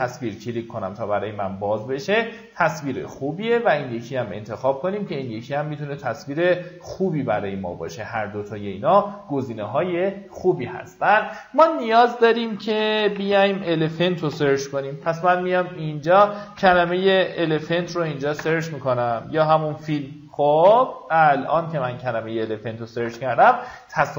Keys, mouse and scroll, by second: 13.7-15.3 typing, 16.5-18.4 typing, 21.2 click.